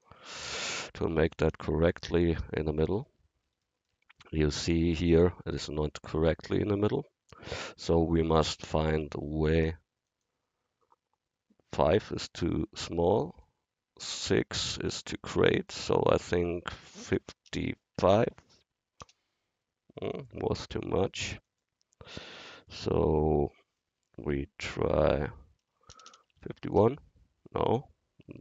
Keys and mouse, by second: 1.5-3.0 middle drag, 3.1-4.2 middle drag, 18.3 5, 26.1 BackSpace.